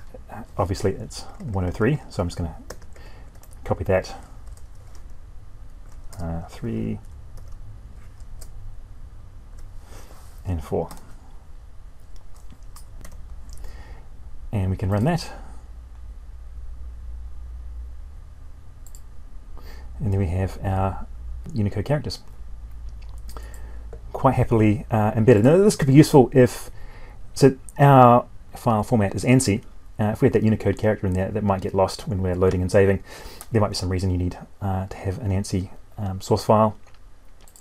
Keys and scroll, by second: 2.6 ctrl+c, 3.5 ctrl+v, 12.8 F9.